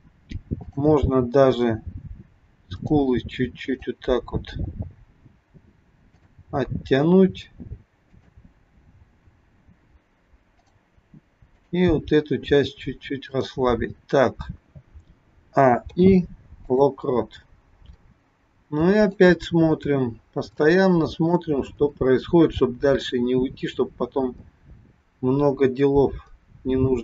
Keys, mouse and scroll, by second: 0.6 click, 1.7 g, 3.7 click, 4.3 g, 7.9 click, 9.3 g, 11.4 click, 12.6 g, 15.2 a, 15.9 i, 19.0 click, 19.7-20.6 scroll down 3, 20.7 shift+middle click, 22.7 click.